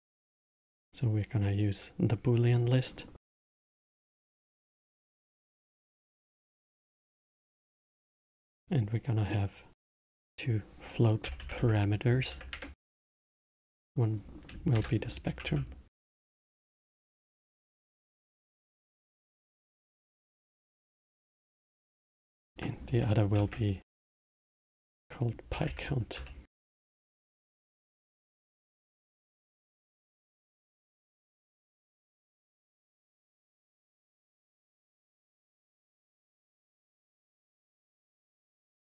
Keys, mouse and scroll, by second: 2.2-5.3 drag, 10.0-13.1 drag, 13.5-16.7 drag, 18.2-21.3 drag, 22.0-25.2 drag, 28.0-31.7 middle drag, 31.7-34.8 drag, 35.3-37.0 middle drag, 37.0 click, 37.6 click.